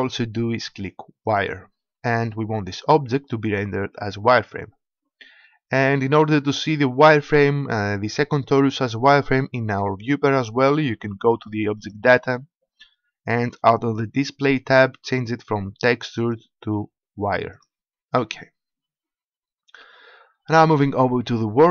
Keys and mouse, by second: 11.7-13.7 drag, 16.1-18.0 drag.